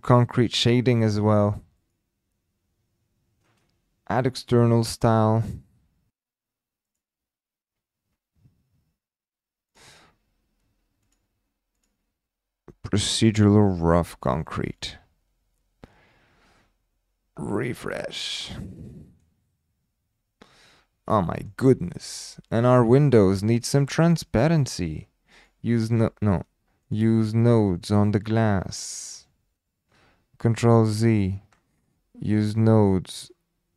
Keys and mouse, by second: 0.2 shift+middle click, 1.8 click, 5.4 click, 17.6 click, 18.9 middle drag, 21.2 shift+middle drag, 21.8-22.2 middle drag, 22.5 click, 25.3 click, 26.8 click, 27.7 click, 30.5 ctrl+z, 32.2 click, 33.1 click.